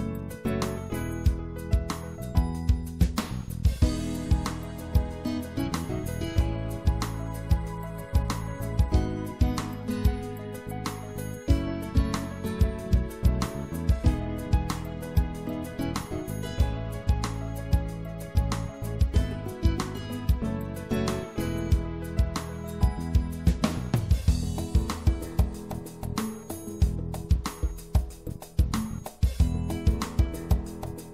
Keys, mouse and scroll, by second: 8.6 c, 23.1-28.9 middle drag, 25.7 c.